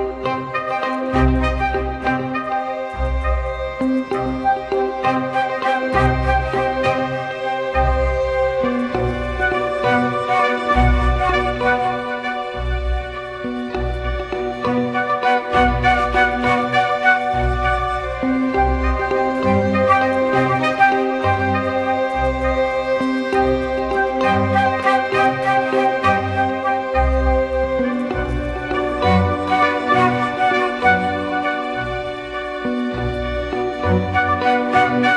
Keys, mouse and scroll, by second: 1.9 double click, 13.4 ctrl+t, 18.2 Return, 32.5 ctrl+t.